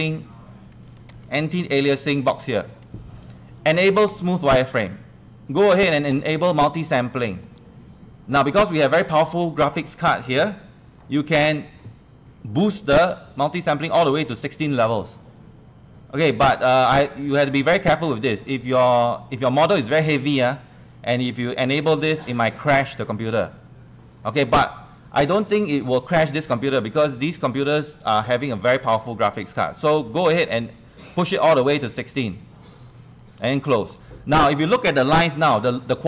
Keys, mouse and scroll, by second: 1.1 ctrl+1, 1.2 ctrl+1, 1.6 click, 2.1 ctrl+click, 3.0 Escape, 4.1 click, 20.8 click, 35.6 ctrl+1, 35.6 ctrl+1.